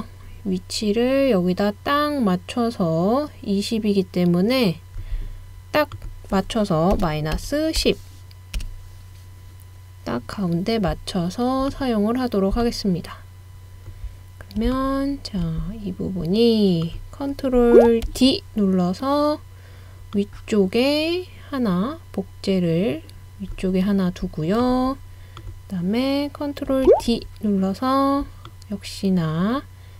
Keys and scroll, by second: 6.7-8.3 typing, 8.6 Return, 18.1 super+d, 26.9 super+d.